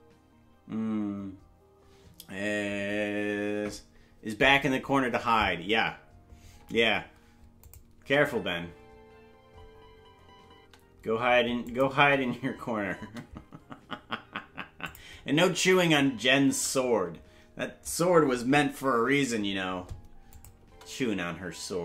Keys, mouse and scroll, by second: 7.6 click, 8.0 space, 11.1 space, 11.7 click, 11.9 space, 14.8 click, 14.8 space, 15.2 space, 16.6 space, 20.3 click, 20.6 space.